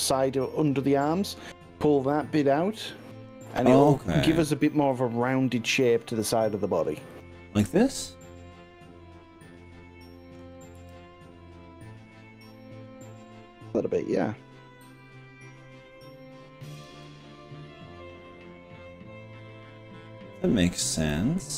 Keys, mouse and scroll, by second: 0.1-2.7 middle drag, 2.9 middle drag, 3.9-4.3 middle drag, 4.9-5.9 drag, 7.1 shift+click, 7.7-8.8 middle drag, 9.1-10.4 middle drag, 10.9 g, 16.9 click, 17.0-18.9 middle drag, 19.0-20.7 middle drag, 21.1 middle click.